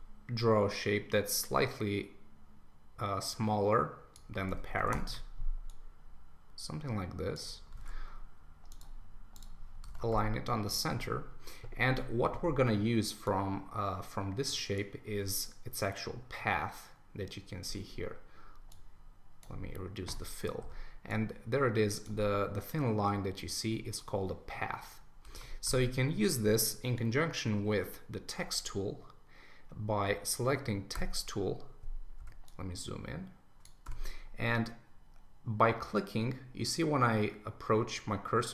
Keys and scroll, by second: 4.9 Return, 7.8 super+a, 9.9 super+d, 25.3 super+1.